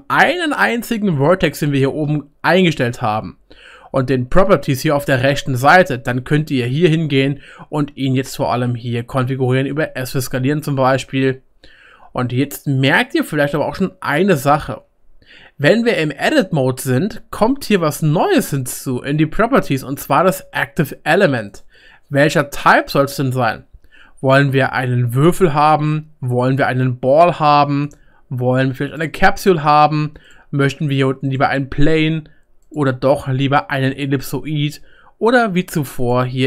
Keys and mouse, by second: 5.1-9.3 drag, 5.1-9.3 middle drag, 5.1-9.3 right drag, 9.7 s, 11.3-13.9 drag, 11.3-13.9 middle drag, 11.3-13.9 right drag, 16.0-21.2 drag, 16.0-21.2 middle drag, 16.0-21.2 right drag.